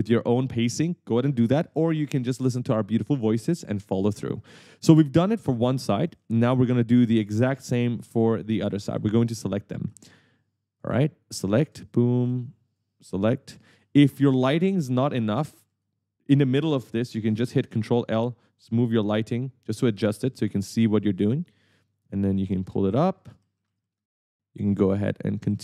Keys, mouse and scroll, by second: 3.9 right click, 4.5-7.9 typing, 8.6 right click, 11.1 shift+click, 11.9 right click, 12.9 shift+click, 13.9 s, 14.2 a, 15.4 d, 15.7 a, 17.8 ctrl+l, 19.9 right click, 21.5 shift+click, 22.8 right click, 23.0-24.3 typing, 25.1 shift+click.